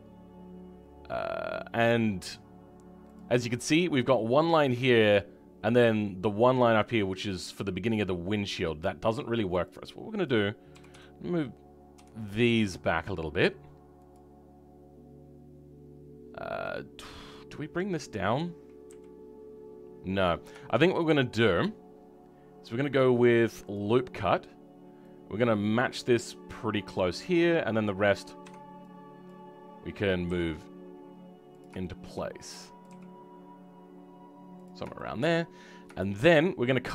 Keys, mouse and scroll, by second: 3.0 click, 15.1-16.5 scroll down 3, 16.5 middle click, 16.7-18.8 middle drag, 18.8 KP_3, 19.9-20.6 scroll up 2, 20.6 shift+middle click, 21.1-23.6 scroll down 3, 23.6-28.3 drag, 28.3 w, 31.7-32.7 shift+middle drag, 32.7 click, 32.8 g, 34.9 shift+middle click, 35.4-35.9 scroll up 1, 35.9 shift+middle click.